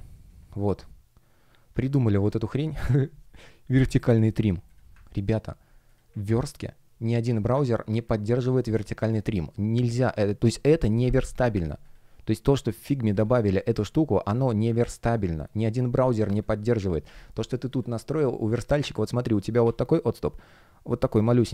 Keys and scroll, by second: 1.6 F1.